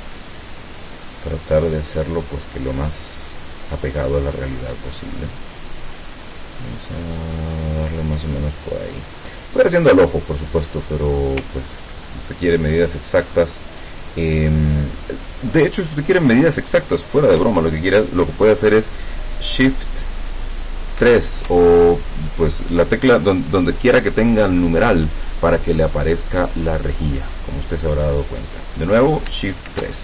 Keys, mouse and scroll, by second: 4.5-9.2 drag, 10.5 click, 11.6-13.1 ctrl+drag, 21.1 shift+3, 29.7 shift+3.